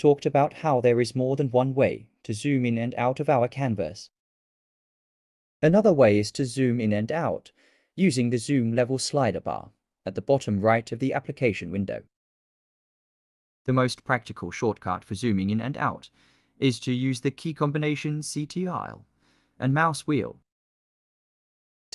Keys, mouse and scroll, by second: 0.6-1.0 ctrl+scroll up 2.